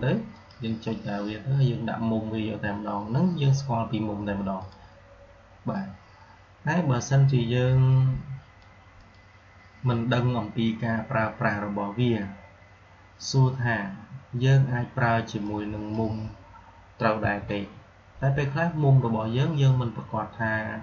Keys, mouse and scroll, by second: 0.2 click, 4.5-8.8 drag, 15.4-16.0 drag, 17.1 Delete.